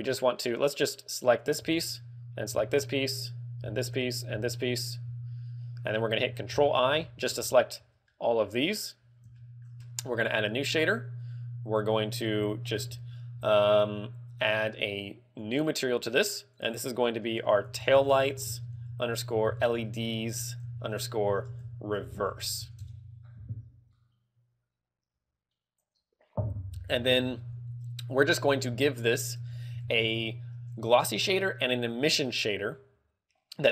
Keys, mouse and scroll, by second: 1.9 l, 2.8 l, 3.9 l, 4.6 l, 5.2 z, 6.7 ctrl+i, 7.5 scroll down 2, 7.7 z, 8.3 middle click, 8.8 scroll up 3, 9.6 shift+middle click, 11.1 click, 15.5 click, 16.7 click, 28.5 middle click, 28.9 scroll up 1, 29.3 click, 29.6 x, 30.0 shift+a.